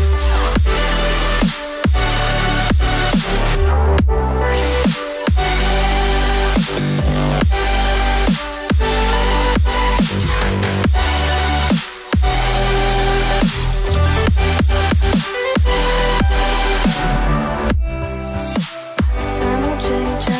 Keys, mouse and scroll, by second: 0.9 right click, 2.1 right click, 6.4 ctrl+d, 8.7 ctrl+scroll up 1, 12.1 BackSpace, 13.7 5, 18.2 space, 19.6 space.